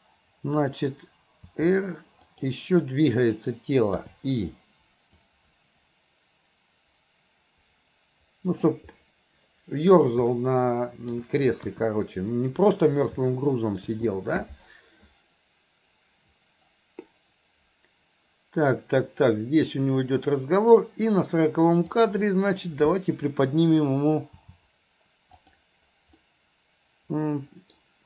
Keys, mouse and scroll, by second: 5.3-8.8 drag, 10.4-11.1 middle drag, 13.3-13.8 middle drag, 16.1-20.8 drag, 21.9 click, 26.2-28.0 middle drag.